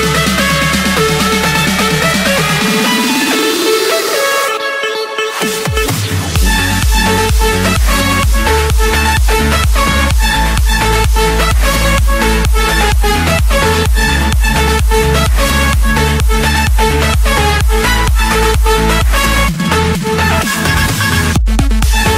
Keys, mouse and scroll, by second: 0.7-1.1 scroll up 10, 1.4-2.1 scroll, 2.2 click, 3.1 click, 3.5-4.1 scroll, 4.1 scroll up 10, 4.9 click, 5.1-5.7 scroll down 11, 6.0-6.6 scroll up 15, 6.8 Escape, 7.3 click, 8.0 click, 8.4 click, 9.1 click, 13.4 click, 14.0 Escape, 14.8 Escape, 15.1 click, 15.5 click, 17.0 Delete, 18.1 Escape, 19.5 click, 20.2 click.